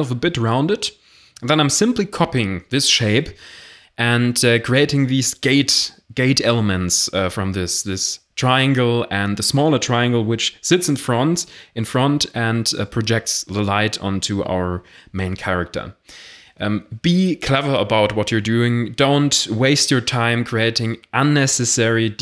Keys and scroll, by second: 1.0 e, 1.8 s, 3.8 g, 3.9 z, 6.7 Tab, 7.1-8.7 typing, 8.4 Tab, 10.0 Tab, 10.3 shift+d, 10.7 p, 10.9 Tab, 11.4 a, 11.7 f, 11.9 Tab, 15.1 shift+a, 18.4 s, 19.9 g, 21.1 shift+a.